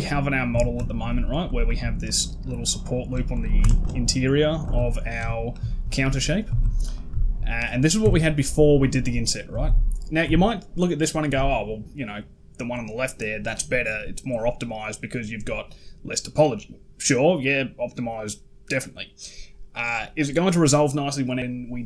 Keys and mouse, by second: 0.3 Tab, 0.7 shift+middle click, 1.4 alt+click, 2.3 alt+shift+click, 2.6 alt+shift+click, 3.3 ctrl+z, 3.5 alt+shift+click, 4.4 a, 4.6 a, 5.0 Tab, 5.5 shift+drag, 6.3 a, 6.4 a, 6.7 click, 7.0 shift+drag, 7.8 Tab, 9.3 a, 10.1 Tab.